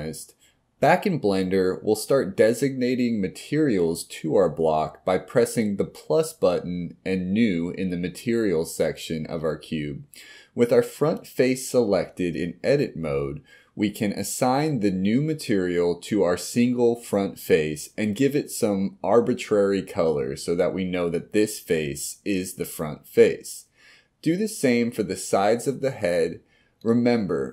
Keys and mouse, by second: 10.0 click, 12.0 click, 12.8 click, 13.0-17.0 drag, 15.0 BackSpace, 17.7 KP_1, 20.0 click, 20.7 click, 22.1 click, 25.8 click, 26.8 click, 27.3-27.5 middle drag.